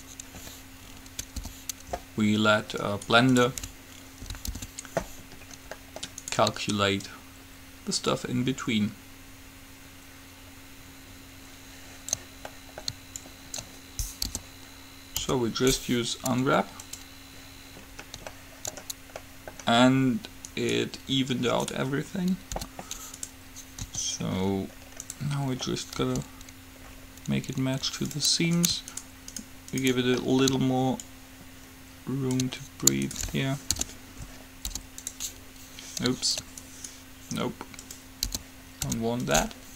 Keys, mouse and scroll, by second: 1.5 p, 3.1-4.8 right drag, 4.8 alt+p, 6.0 middle click, 6.5-8.4 right drag, 7.1-9.1 drag, 7.1 middle click, 12.7 middle click, 13.4-15.1 drag, 14.5 p, 15.4 u, 18.6-20.6 middle drag, 20.6-22.5 right drag, 22.7 g, 24.1 s, 26.2 g, 28.8-30.3 right drag, 30.3-31.6 middle drag, 31.2-33.1 drag, 31.2 right click, 31.9-33.0 middle drag, 33.2-35.1 right drag, 34.0 alt+p, 34.9 u, 36.9-38.3 right drag, 38.6 p, 39.1 u.